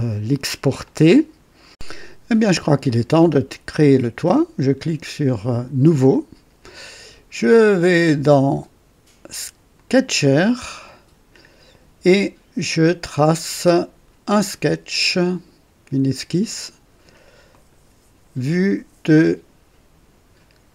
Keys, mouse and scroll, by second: 0.8 click, 5.8 click, 7.9 click, 9.7 click, 17.4 click.